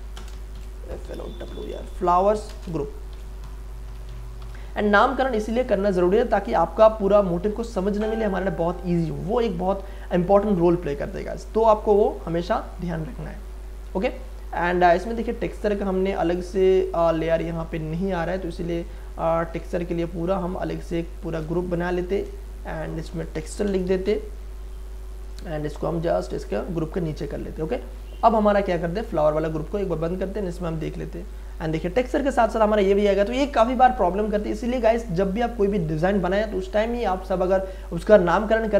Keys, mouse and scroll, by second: 0.0-4.9 typing, 5.9 click, 5.9 click, 10.4-11.9 scroll down 1, 12.2 click, 15.4-17.0 scroll down 1, 18.0-18.6 scroll down 1, 18.6-19.1 scroll up 1, 19.1-19.9 scroll down 1, 20.6 shift+click, 21.4-21.8 ctrl+scroll up 1, 21.8 ctrl+g, 22.8 click, 22.8 click, 23.4-24.5 typing, 25.2 click, 27.0-27.4 scroll up 1, 29.0 click, 34.4 click, 36.4-37.9 scroll down 1, 37.9 click.